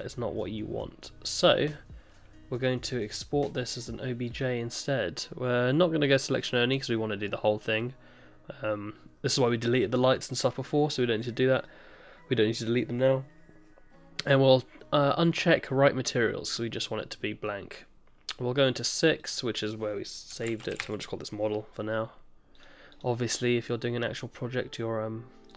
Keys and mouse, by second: 2.5-4.5 drag.